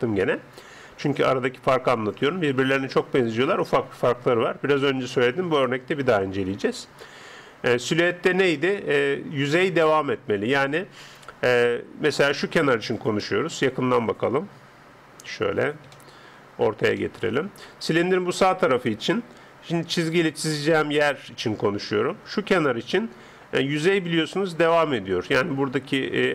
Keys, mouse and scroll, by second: 15.9-19.0 middle drag, 19.7-26.3 d, 21.0 click, 24.3 click.